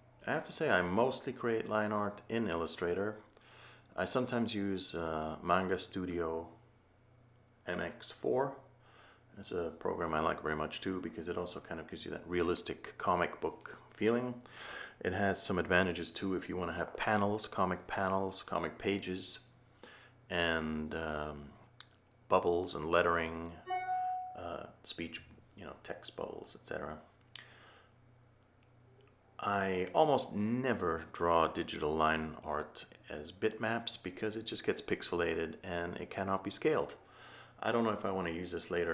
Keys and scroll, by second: 11.6 a.